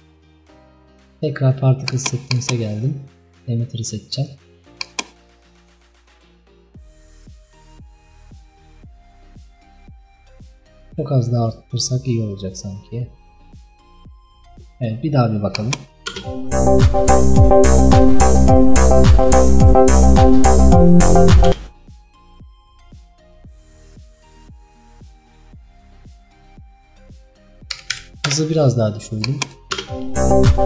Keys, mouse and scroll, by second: 1.9-4.9 drag, 12.3-13.8 drag, 15.6 click, 16.2 space, 21.6 space, 28.3 click, 29.3 click, 29.8 space.